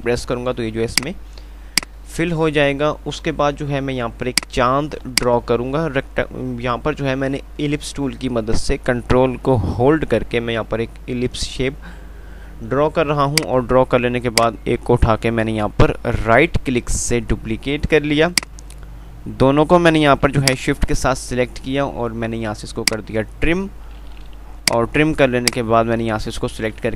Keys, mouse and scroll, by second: 1.0 click, 1.8 F2, 1.8 typing, 2.0 click, 2.3 F2, 4.7-18.6 drag, 6.1 typing, 18.6 right click, 20.7 shift+click, 22.8 shift+click, 26.7 shift+Delete.